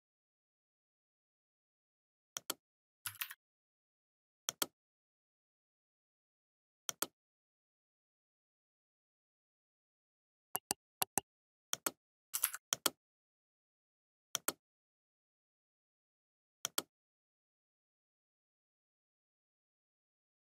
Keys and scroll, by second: 3.3 Left, 4.1 ctrl+d, 4.4 Left, 5.0 Right, 5.1 Left.